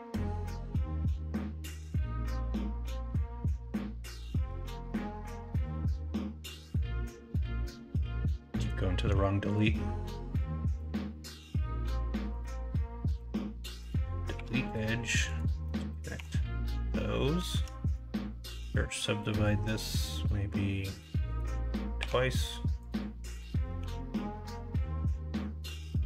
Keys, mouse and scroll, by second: 0.1 x, 5.0 x, 6.4 x, 7.0 x, 8.0 1, 12.1 2, 13.0 x, 14.3 1, 16.1 f, 18.7 right click, 21.9 2, 23.7 g.